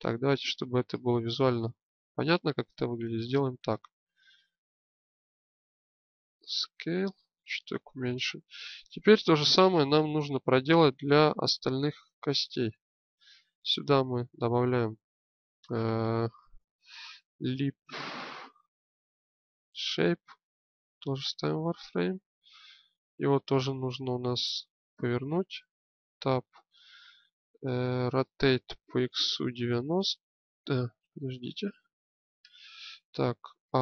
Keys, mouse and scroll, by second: 0.2-1.5 drag, 3.0 Tab, 6.4 s, 8.8-10.2 drag, 11.9 Tab, 12.8 click, 26.1 Tab, 28.3 r, 33.6 a.